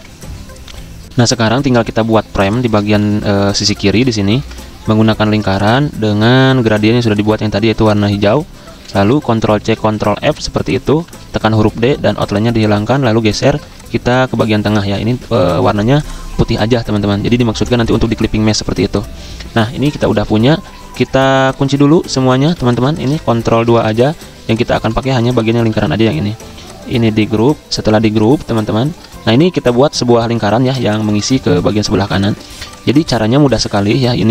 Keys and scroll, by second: 1.0 F9, 3.1 i, 6.4 v, 8.8 v, 9.5 ctrl+c, 9.8 ctrl+f, 10.2-11.5 typing, 15.1 x, 22.6 z, 23.5 ctrl+2, 24.8 v, 25.7 ctrl+z, 26.2 ctrl+g, 32.5 v.